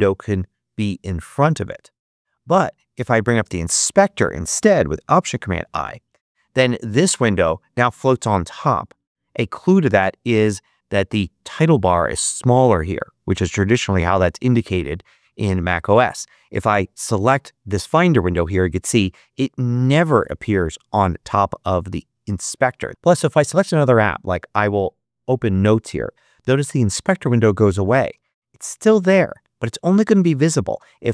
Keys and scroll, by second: 5.2 alt+super+i, 6.0 alt+super+i.